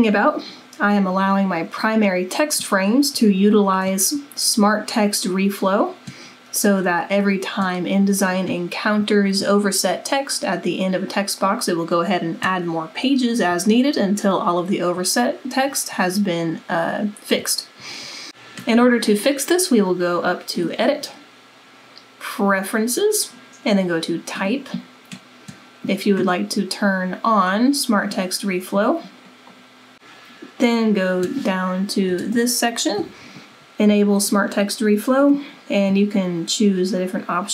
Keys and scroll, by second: 32.2 super+=.